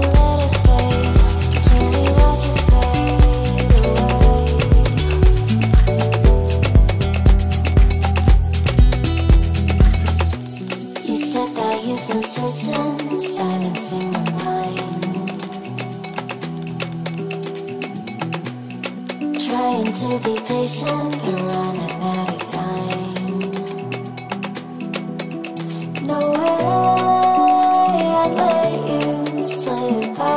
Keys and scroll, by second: 0.3 ctrl+v, 3.7 ctrl+g, 4.1 c, 17.6-18.7 typing.